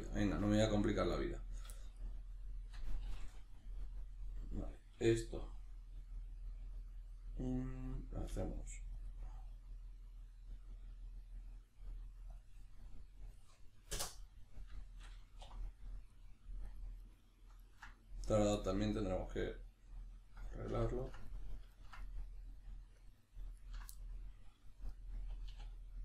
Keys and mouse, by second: 1.8-16.1 shift+middle drag, 15.4 3, 16.1 right click, 16.7 ctrl+right click, 17.0 ctrl+right click, 17.6 ctrl+right click, 18.5-20.8 shift+middle drag, 20.8 ctrl+right click, 21.0 ctrl+right click, 21.3-23.0 middle drag, 23.0 ctrl+right click, 23.6 ctrl+right click, 24.0-26.0 middle drag, 25.5 e.